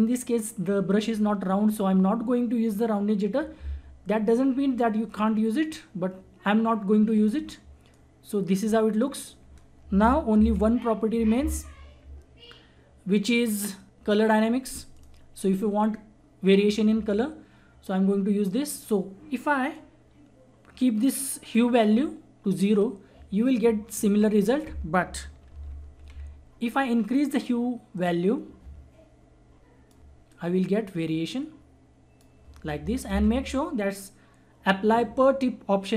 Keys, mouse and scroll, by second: 7.9 click, 10.3 ctrl+z, 11.3 ctrl+z, 14.9 click, 15.0 click, 19.7-25.5 drag, 25.5 ctrl+z, 27.9-33.1 drag, 33.1 ctrl+z.